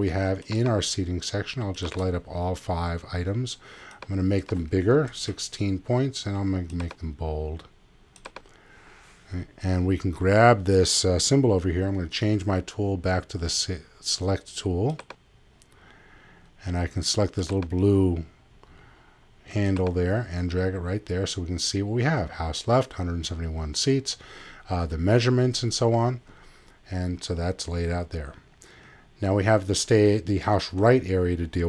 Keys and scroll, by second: 4.8-5.7 typing.